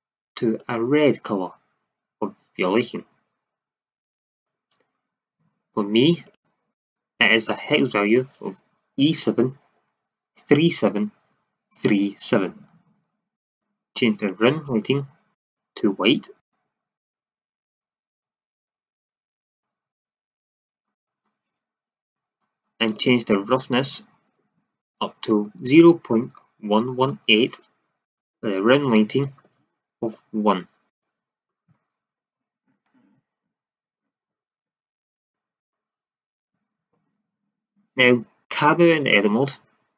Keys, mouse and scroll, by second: 0.6-3.5 drag, 6.2-8.6 drag, 13.3-16.0 drag, 22.9-31.4 drag, 33.9-34.3 drag, 37.1 shift+z, 38.5 Tab.